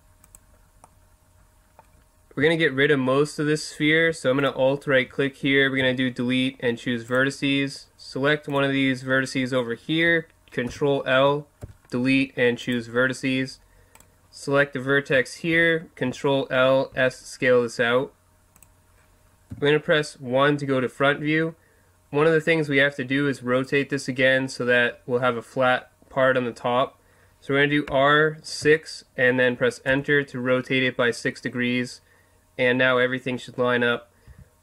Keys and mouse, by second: 0.3 click, 0.8 middle click, 1.6-2.8 drag, 2.0 middle click, 4.4 right click, 5.8 Delete, 8.5 right click, 10.7 ctrl+l, 11.6 Delete, 13.9 right click, 15.5 ctrl+l, 16.9 s, 18.6 click, 19.5 KP_1, 27.9 r, 34.3 s.